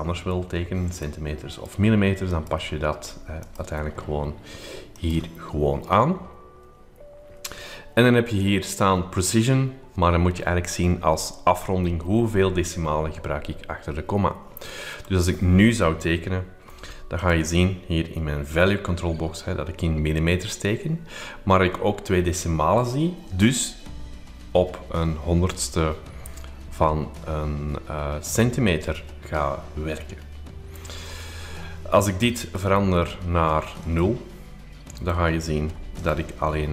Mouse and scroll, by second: 1.0-3.2 drag, 3.4 click, 4.9-14.9 drag, 14.9 scroll, 14.9-15.7 scroll up 2, 17.3 click, 32.4 click, 33.8 click, 35.0-35.8 scroll up 2, 35.0 middle click, 36.0 click.